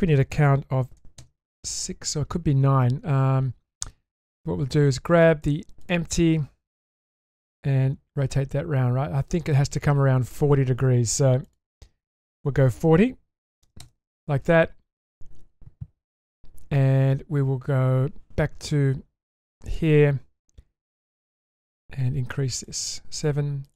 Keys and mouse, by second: 7.4-9.8 drag, 11.4 click, 12.3-13.8 drag, 19.3 click, 22.5 click.